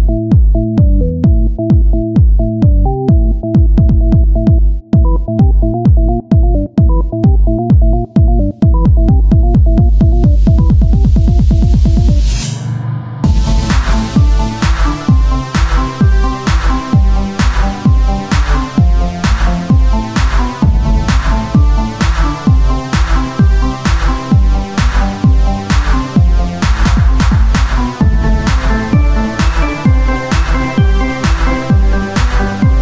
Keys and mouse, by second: 1.8 KP_1, 6.4 click, 7.2 shift+a, 9.6 click, 9.7 Tab, 10.3 Tab, 11.0 ctrl+Tab, 12.8 e, 15.3 e, 17.3 ctrl+Tab, 19.9 right click, 20.5 right click, 21.1 x, 22.4 ctrl+Tab, 25.6 w, 27.0-28.4 drag, 29.1 w, 30.3 Tab, 32.1 click.